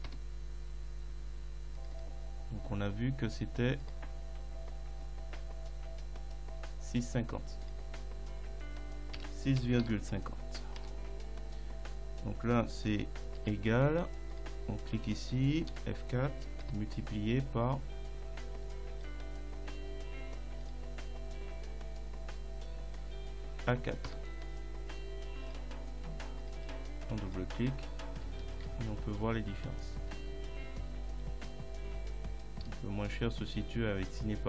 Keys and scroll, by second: 0.1 Return, 9.2 6, 9.6 ., 9.8 5, 10.8 Return, 13.4 =, 15.7 F4, 16.7 *, 24.1 Return, 28.4 ctrl+Down, 30.0 Left, 31.5 Right, 32.7 Left.